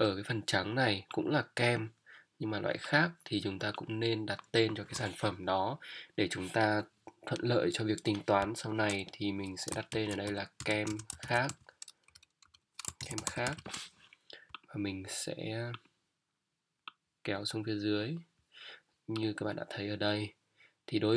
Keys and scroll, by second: 9.9 shift+k, 10.2 shift+e, 11.5-13.5 typing.